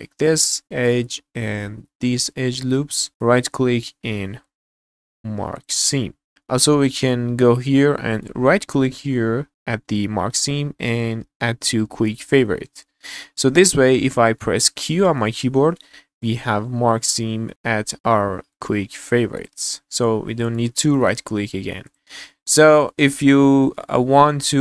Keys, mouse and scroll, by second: 0.6 scroll down 2, 0.6 middle click, 0.9 scroll up 1, 1.1 shift+middle click, 2.2 alt+shift+click, 3.0 scroll down 3, 3.1 shift+middle click, 3.1 right click, 6.3 right click, 12.3 click, 14.1 middle click, 14.8 q, 19.4 click, 20.5 middle click, 21.0 right click, 21.8 click, 22.7 shift+middle click, 22.8 shift+click, 22.9 shift+middle click.